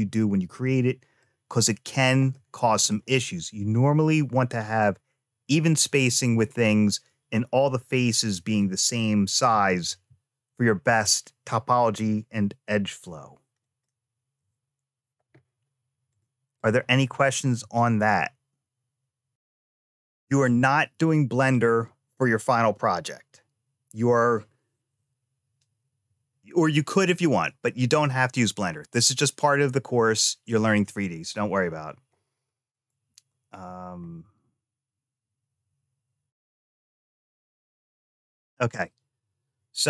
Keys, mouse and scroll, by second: 0.5 middle click, 2.2 middle click, 9.4 ctrl+z, 9.7 ctrl+z, 13.5 click, 16.0 click, 16.4 click.